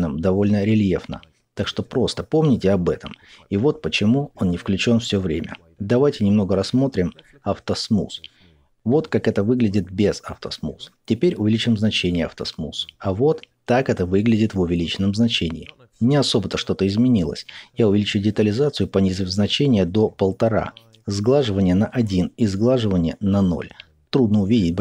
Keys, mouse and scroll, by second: 1.4 middle click, 2.2-7.0 drag, 7.0-9.5 middle drag, 9.5-12.0 drag, 12.0-13.2 middle drag, 13.2-14.7 drag, 14.7-19.0 middle drag, 19.0-24.2 drag, 24.2 middle click.